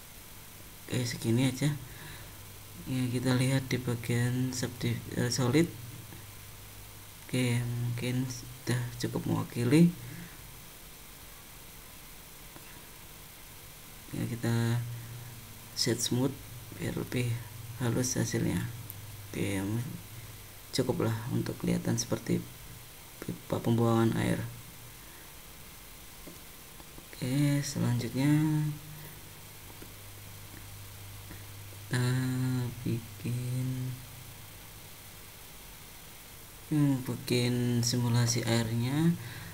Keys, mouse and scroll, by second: 1.2 middle click, 3.7 middle click, 5.4 click, 6.0 middle click, 7.2 click, 7.9 click, 8.4 middle click, 10.1 click, 11.0 click, 11.8 click, 13.5 Tab, 15.0 right click, 17.0 middle click, 18.5 middle click, 20.0-20.5 scroll down 2, 20.6 middle click, 22.3 shift+middle click, 23.1-23.4 scroll down 2, 23.6 middle click, 26.3 click, 27.4 click, 32.2 click.